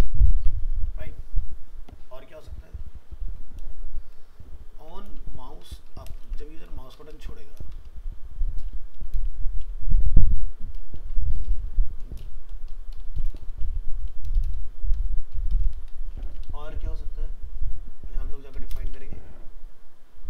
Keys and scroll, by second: 0.4 ctrl+s, 5.1 ctrl+c, 6.2 ctrl+v, 16.2 ctrl+c, 18.9 ctrl+v.